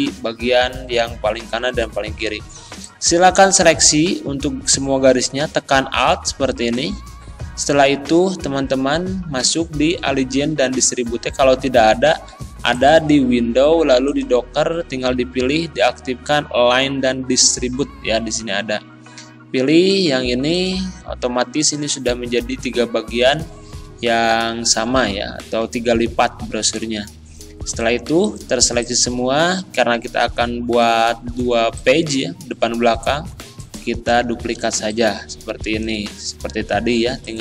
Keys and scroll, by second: 34.6 z.